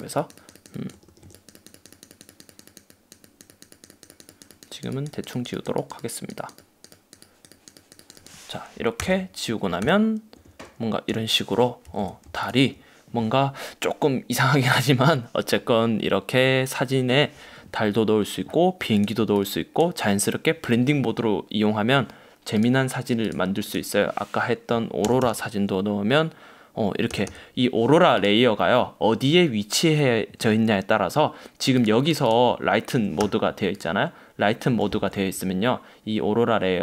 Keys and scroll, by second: 9.1 super+0, 9.9 super+-, 10.7 super+-, 11.2 super+=, 12.0 v, 25.1 super+1, 27.2 super+1.